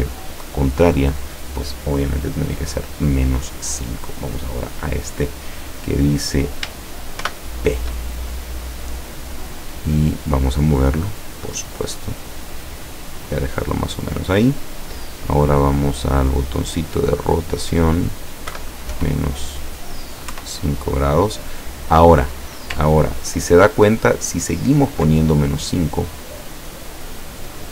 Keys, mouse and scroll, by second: 0.1 click, 2.5 click, 4.5 click, 7.3 shift+p, 10.0 click, 11.1-13.8 drag, 16.0 click, 17.1 click, 18.6 KP_Subtract, 19.0 KP_5, 20.4 KP_Enter, 22.9-23.4 ctrl+scroll up 2, 23.6-24.3 ctrl+scroll down 4, 25.9 click.